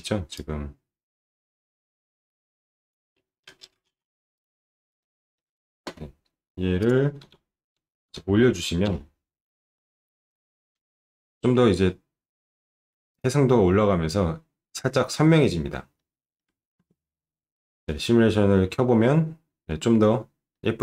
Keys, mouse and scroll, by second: 4.3 click, 5.0 alt+middle click, 6.8 click, 7.2 1, 8.9 Return, 8.9 0, 13.1 click, 15.9 alt+middle click, 17.0 space, 20.5 middle click.